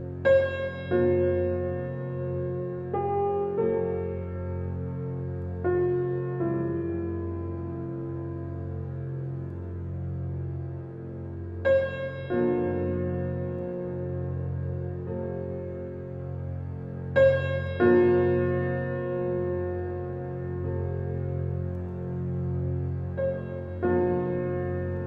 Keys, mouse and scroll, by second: 2.5 scroll down 1, 2.9 alt+click, 3.8 alt+scroll down 1, 3.9-6.5 alt+drag, 7.6-9.1 alt+drag, 9.1 alt+right click, 10.3 alt+click, 11.1-12.5 alt+middle drag, 12.5 alt+right click, 13.0 alt+middle click, 13.7 alt+click, 14.4 alt+right click, 14.8 alt+middle click, 15.3 alt+click, 15.8-18.9 alt+middle drag, 18.9-22.7 drag.